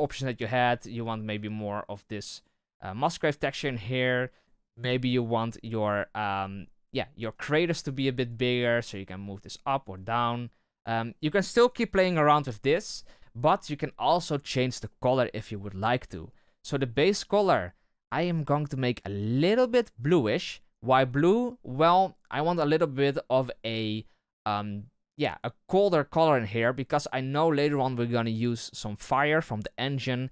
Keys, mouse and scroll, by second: 0.5-3.5 drag, 3.5-7.4 middle drag, 8.7-11.2 drag, 17.0-19.4 drag.